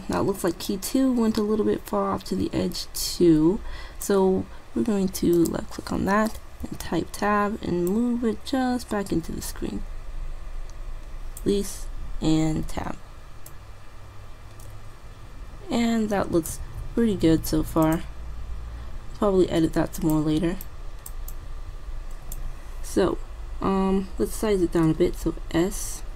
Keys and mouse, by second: 0.7-2.5 drag, 5.5-7.3 drag, 6.7 Tab, 7.9-9.8 drag, 12.6 Tab, 13.6-15.2 drag, 16.7 alt+a, 17.9-19.7 drag, 20.0-23.1 drag, 25.3 s.